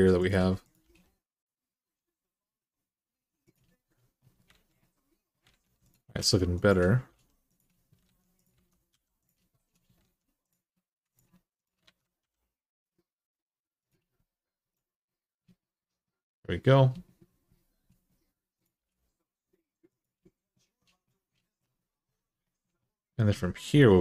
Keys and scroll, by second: 0.6 g, 4.3 alt+z, 5.3 alt+z, 5.9-6.8 typing, 7.9 alt+z, 8.4 alt+z, 8.7 g, 9.8 alt+z, 11.6 alt+z, 12.0 g, 17.7 g, 18.6 g.